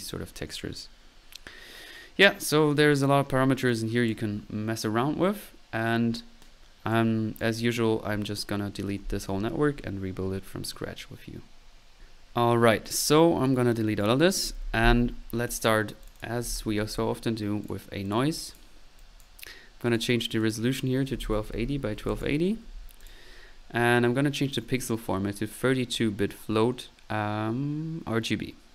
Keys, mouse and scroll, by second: 3.7 click, 4.4 click, 4.4 typing, 6.9 click, 13.5-14.2 right drag, 13.5-14.7 typing, 14.2 right click, 14.7 Delete, 15.1 middle click, 15.5-16.0 drag, 15.8 right drag, 16.0 middle click, 16.2 click, 16.3 middle click, 16.5 n, 17.7 right drag, 19.9 drag, 20.4 drag, 23.0-25.2 middle drag.